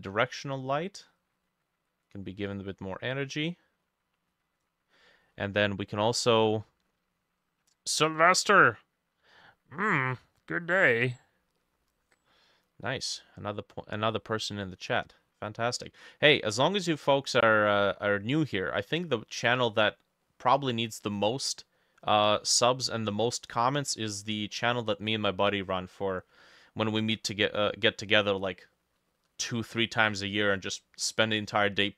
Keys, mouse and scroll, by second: 5.2 middle click, 11.6 middle click, 12.2 middle click, 12.9 middle click, 13.4 scroll up 2, 14.1 middle click, 15.2 middle click, 15.5 scroll down 1, 15.6 middle click, 16.1 middle click, 17.3 middle click, 17.9 middle click, 18.6 middle click, 19.6 middle click, 20.3 middle click, 21.0 middle click, 21.6 middle click, 22.0 middle click, 22.5 middle click, 23.5 middle click, 24.1 middle click, 24.6 middle click, 25.1 middle click, 25.6 middle click, 26.2 middle click, 27.9 middle click, 28.8 middle click, 29.7 middle click, 30.3 middle click, 30.8 middle click, 31.4 middle click.